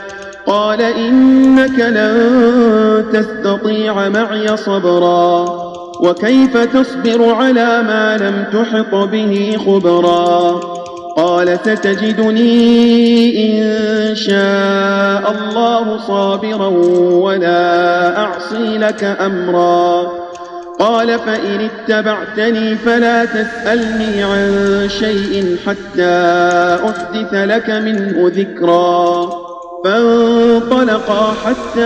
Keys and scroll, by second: 4.4 space, 6.1 space, 9.3 space, 10.2 space, 11.6 space, 13.0 space, 14.2 space, 16.8 space, 18.8 space, 26.8 space.